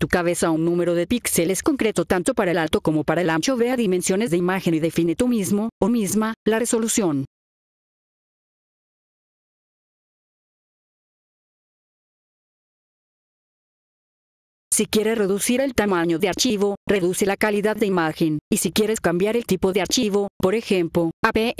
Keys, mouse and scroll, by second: 1.2 click, 3.7 click, 7.2 click, 10.4-12.0 typing, 13.6 F4, 14.6 click, 17.4-20.3 drag, 20.8 click.